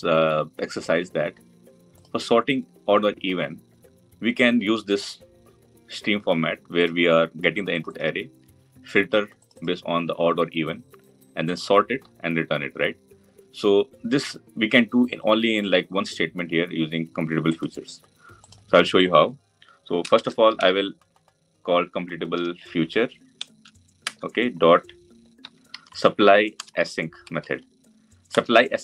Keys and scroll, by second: 23.9 Return.